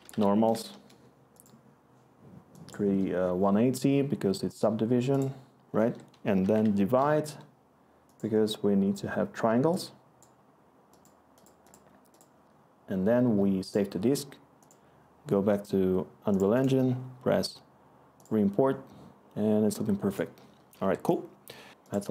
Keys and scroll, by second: 0.0-0.6 typing, 0.7 Return, 6.0-7.0 typing, 7.1 Return, 20.1-21.2 typing.